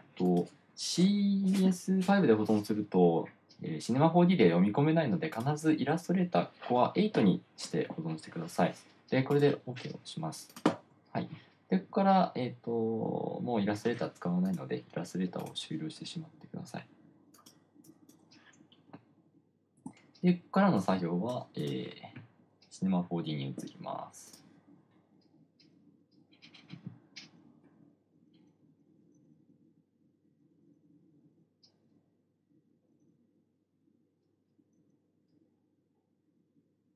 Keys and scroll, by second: 20.2 F6.